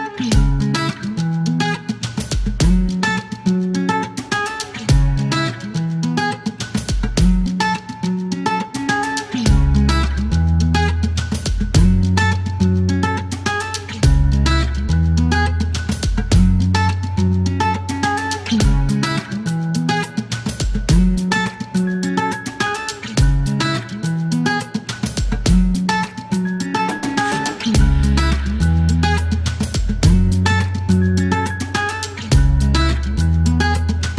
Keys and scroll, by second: 19.7 e, 20.8 t, 22.7 KP_1, 22.8 KP_3, 23.3 KP_3, 23.3 Return, 23.7 e, 25.4 c, 25.8 space, 29.2 typing, 30.6 space, 34.0 typing.